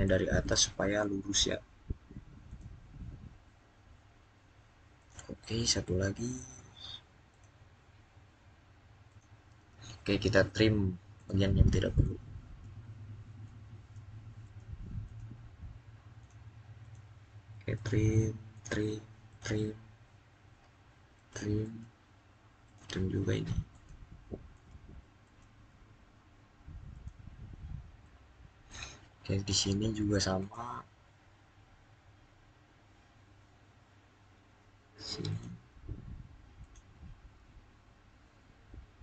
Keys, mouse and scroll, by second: 0.2 middle click, 2.3 click, 4.8 click, 5.5 middle click, 7.1 click, 11.0 click, 27.8-30.2 middle drag, 30.2 click, 35.1 click, 38.9 click.